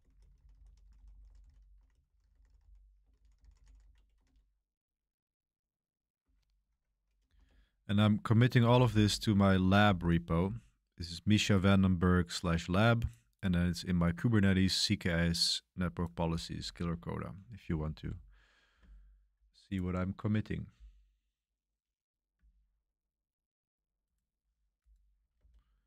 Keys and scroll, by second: 0.0-4.7 typing, 6.2-9.4 typing, 25.3 super+3.